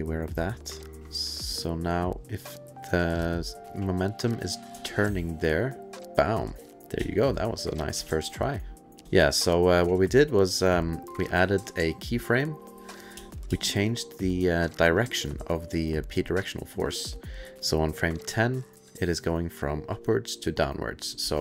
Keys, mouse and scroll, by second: 2.0 click, 4.7 space, 8.4 space, 8.6 click, 9.0 space, 9.2 click, 11.1 click, 13.1 space, 13.5 space, 13.9 click, 19.0-21.4 drag, 21.2 space.